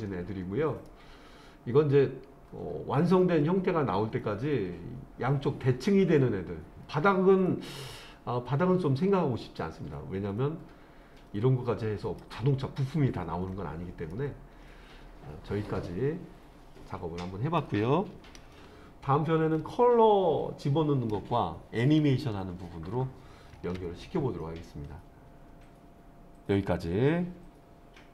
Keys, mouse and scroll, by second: 0.9-12.2 middle drag, 12.9-13.5 scroll up 1, 13.5-14.1 scroll up 1, 14.1-17.6 middle drag, 23.6 ctrl+s.